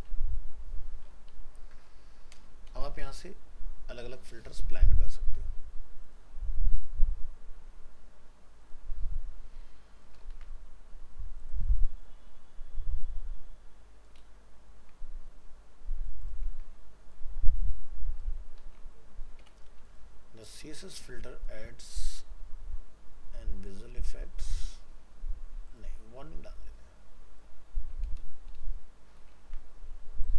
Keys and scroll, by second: 0.0 ctrl+s, 10.3 ctrl+c, 14.2 ctrl+v, 29.4 ctrl+c.